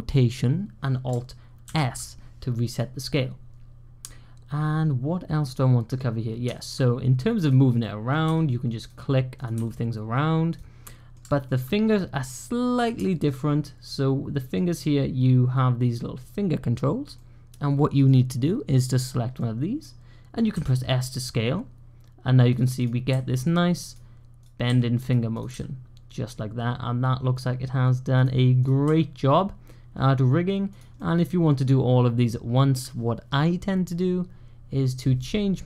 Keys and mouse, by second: 1.5 alt+s, 2.5 click, 3.0-4.9 drag, 5.1-5.7 drag, 5.7 middle click, 7.3 click, 7.7 middle click, 8.1-9.8 typing, 9.2 click, 10.7-11.1 middle drag, 11.4 alt+click, 12.2-12.6 middle drag, 12.9 shift+drag, 13.4-14.4 middle drag, 17.0-17.9 middle drag, 18.9 click, 18.9-20.4 typing, 19.3 middle click, 19.4 click, 22.4-25.8 typing, 25.2 click, 27.8-29.0 typing, 30.3-31.0 typing, 30.8-32.5 drag, 32.5 middle click, 32.5 typing.